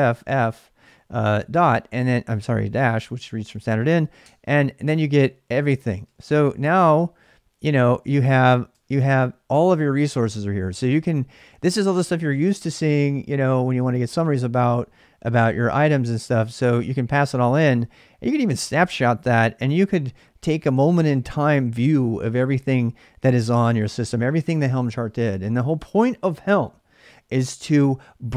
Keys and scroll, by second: 0.0-3.1 typing, 4.0 Return, 5.3-8.4 typing, 8.5 Return, 17.6 space.